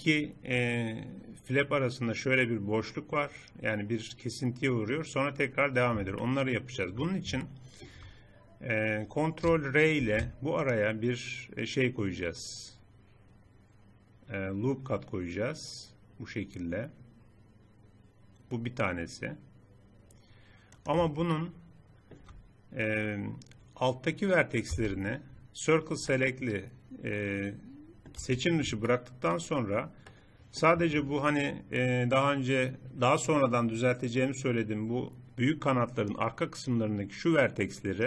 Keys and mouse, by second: 6.2-10.0 middle drag, 10.0 ctrl+r, 21.4-23.4 middle drag, 24.8 c, 28.5-31.7 middle drag.